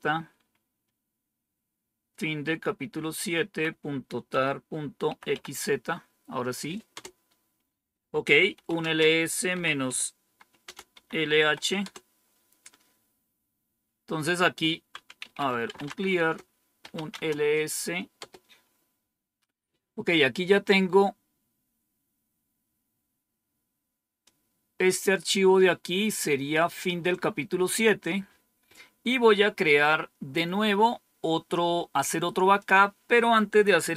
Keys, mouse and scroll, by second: 1.2-2.0 typing, 5.0-6.8 Right, 8.4-9.2 typing, 9.8 Return, 10.9 Return, 11.5-12.2 typing, 14.9-17.2 typing, 18.1 Return, 24.1-26.5 drag, 27.6 click, 32.5 click.